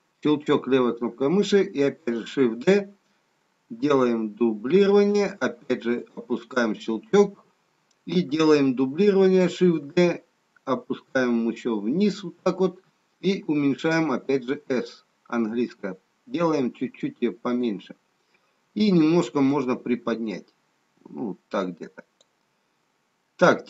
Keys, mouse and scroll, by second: 2.5 shift+d, 9.8 shift+d, 14.0 s, 19.4 click.